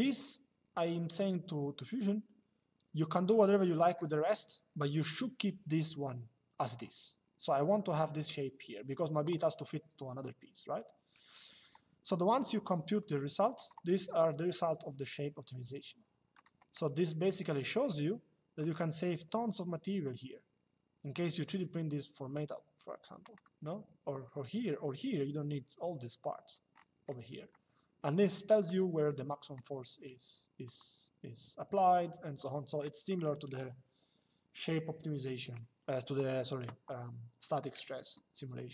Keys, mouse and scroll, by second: 3.5 middle click, 12.6 click, 13.9 shift+middle click, 17.1 shift+middle click, 23.1 middle click, 27.2 middle click, 30.3 click, 32.1 click, 32.9 middle click, 33.3 middle click.